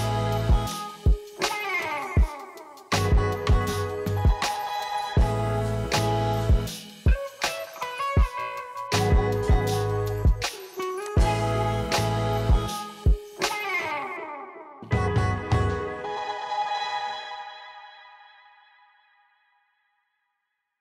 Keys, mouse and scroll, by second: 1.8 g, 4.1 g, 12.7 g.